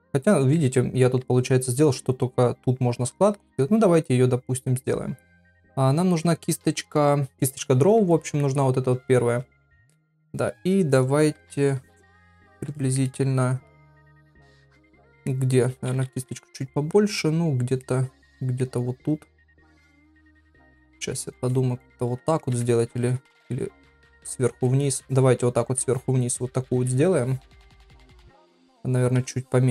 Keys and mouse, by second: 0.8 shift+middle click, 6.9 click, 9.6 ctrl+middle click, 10.1 middle click, 11.3 KP_7, 12.8 middle click, 13.1 middle click, 13.9 middle click, 14.4 shift+middle click, 15.0 middle click, 15.8 ], 15.9 ], 17.8 middle click, 21.4 click, 22.6 ctrl+z, 23.1 ctrl+z, 23.8 click, 24.5 ctrl+z, 25.0 click, 25.9 click, 26.8 ctrl+z, 27.2 click, 27.9 ctrl+z, 29.1 [.